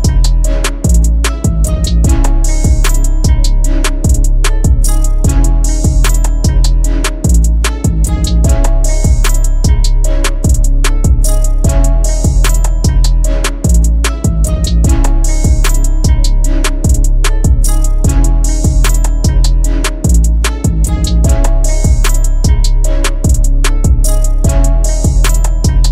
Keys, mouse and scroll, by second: 12.0-12.7 typing, 13.8 typing, 13.8 double click, 25.3 double click.